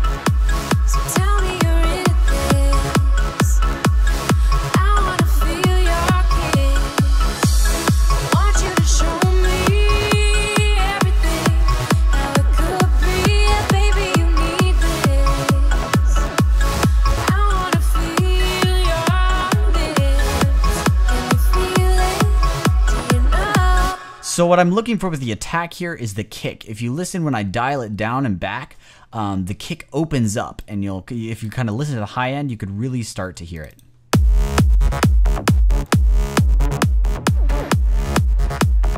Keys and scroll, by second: 23.7 space.